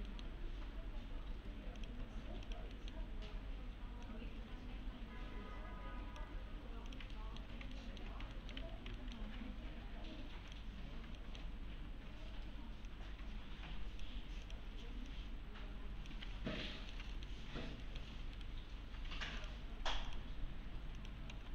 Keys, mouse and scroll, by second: 0.1 middle click, 0.4-1.8 scroll up 1, 1.8 click, 2.5 ctrl+click, 2.7 middle click, 4.1-6.2 click, 7.1 alt+middle click, 7.8 alt+middle click, 8.3 alt+middle click, 8.6 1, 8.6 scroll down 1, 9.0 alt+middle click, 10.1 1, 10.5 click, 11.2 alt+middle click, 11.6 scroll up 1, 12.9-14.1 click, 16.2 1, 16.4 scroll down 1, 16.7 alt+middle click, 18.0-18.4 scroll down 1, 18.4 right click, 19.4 click, 19.8-20.1 scroll down 1, 20.1 click, 21.3 alt+x.